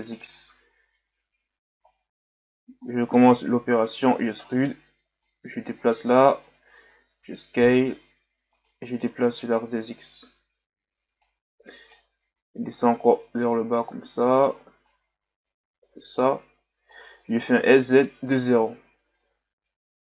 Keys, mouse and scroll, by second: 1.1 KP_1, 1.9-3.0 scroll up 5, 3.1-3.9 scroll down 2, 3.9 e, 5.2-7.0 drag, 7.0 s, 9.2-17.6 drag, 17.6 s.